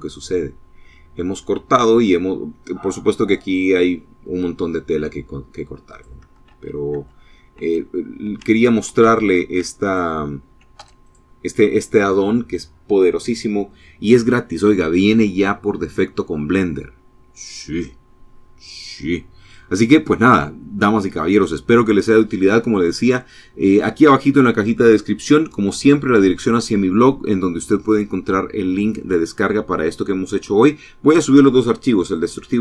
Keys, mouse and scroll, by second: 5.1 click, 5.7 ctrl+z, 7.0 ctrl+z, 7.7 ctrl+z, 9.1 ctrl+click, 10.0 x, 10.3 click.